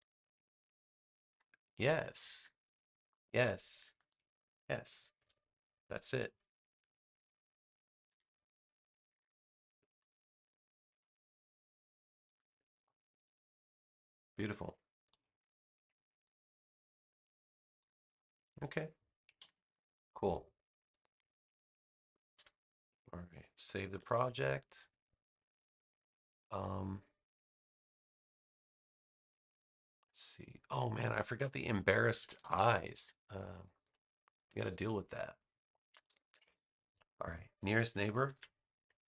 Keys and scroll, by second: 5.1 BackSpace, 7.1 super+j, 8.0 v, 19.3 super+-, 20.6 space, 24.0 super+s, 32.0 super+=, 33.4 space, 38.2 super+c.